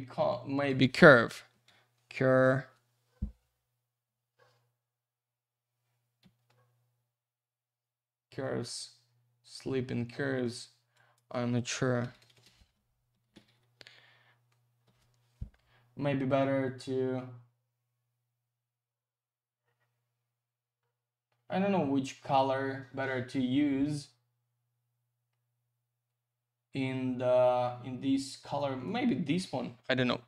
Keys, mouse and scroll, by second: 0.3 click, 1.5 typing, 10.9 click, 12.0 BackSpace, 13.1 typing, 14.6-15.3 typing, 28.5 click.